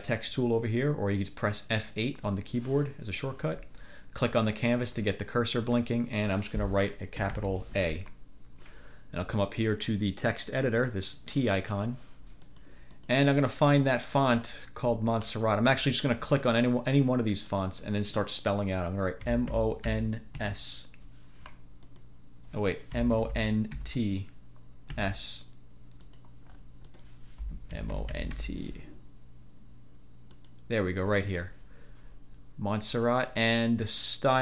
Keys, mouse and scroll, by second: 2.3 click, 4.4 click, 7.4 shift+a, 11.7 click, 12.6 click, 13.1 click, 14.1 click, 14.5 scroll down 2, 15.0 scroll up 2, 15.3 scroll down 2, 15.5-15.9 scroll up 2, 16.1 click, 16.9 click, 17.5 click, 19.0-20.5 typing, 21.9 click, 22.8-25.0 typing, 26.2 click, 26.6 scroll up 2, 27.6-29.0 typing, 30.4 click.